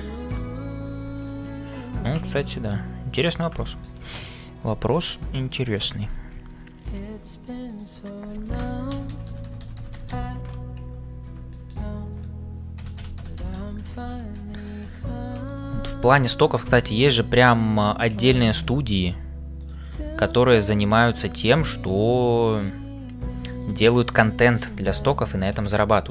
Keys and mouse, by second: 0.0-26.1 typing, 2.2 middle click, 3.6 shift+middle click, 7.7 alt+click, 9.0-15.3 ctrl+KP_Add, 11.4 shift+middle click, 17.5 click, 18.2 shift+click, 19.5 click, 20.2 click, 22.6 click, 23.5 click, 24.7 ctrl+KP_Add.